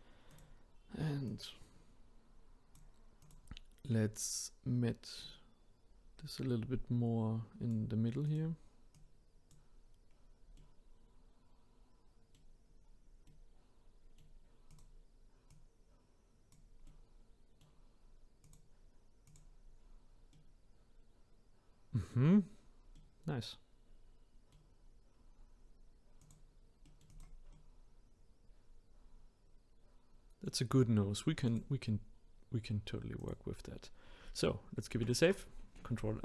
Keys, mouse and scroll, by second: 3.2 click, 5.2 click, 8.3 click, 8.9-10.1 drag, 10.1-10.6 scroll down 1, 10.6-12.8 middle drag, 12.8-13.2 scroll down 1, 13.2-14.7 middle drag, 14.7 click, 15.5 click, 16.9-18.4 middle drag, 18.4 click, 19.3 click, 19.8 scroll down 2, 20.3-22.4 middle drag, 22.4-22.9 scroll down 1, 22.9-24.7 middle drag, 24.7 scroll up 1, 26.2 click, 26.9 middle click, 27.1 click, 27.5-30.5 middle drag, 31.5-33.3 drag, 34.9 ctrl+s.